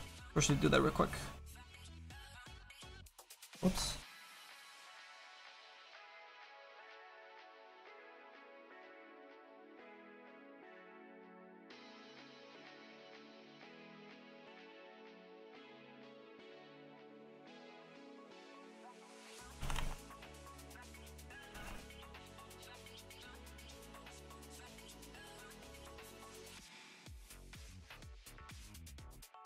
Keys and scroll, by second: 19.7 ctrl+z, 19.8 ctrl+z, 21.6 ctrl+z.